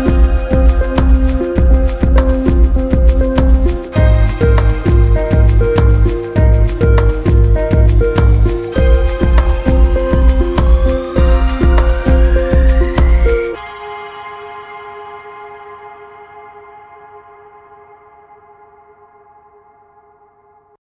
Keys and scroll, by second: 0.6 ctrl+alt+space, 1.3 ctrl+alt+space, 2.8 ctrl+space, 5.0 ctrl+space, 6.2 ctrl+alt+space, 6.8 ctrl+alt+space, 7.5 ctrl+alt+space, 8.2 ctrl+c, 8.9 ctrl+v, 10.1 ctrl+w, 11.2 ctrl+c, 11.6 ctrl+v, 12.8 ctrl+w, 13.1 ctrl+h, 14.2 ctrl+r.